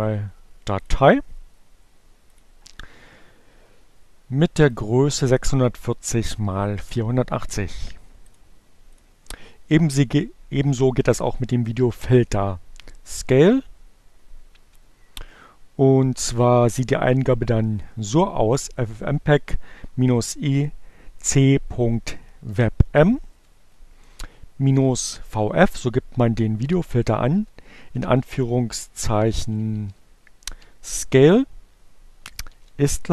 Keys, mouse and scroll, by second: 0.0 right click, 1.8 click, 3.8 click, 5.7 click, 7.7-8.8 drag, 9.0 click, 12.8 Up, 18.0 Left, 21.0 Delete, 21.4-23.1 typing, 24.2 shift+2, 28.2-30.9 typing, 32.3 Delete.